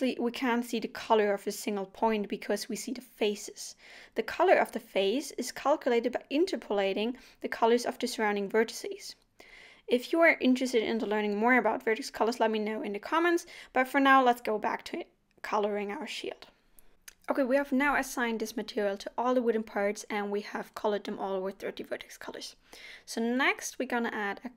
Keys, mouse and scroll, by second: 12.5 o, 14.4 click, 17.3 click, 17.5 shift+a, 21.3 click, 21.7 click, 22.4 click, 22.7 click.